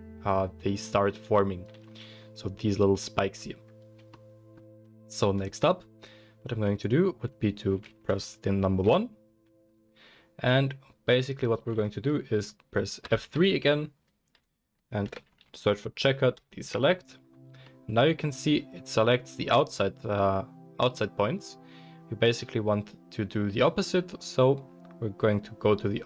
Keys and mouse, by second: 1.9-26.0 middle drag, 8.8 1, 13.1 F3.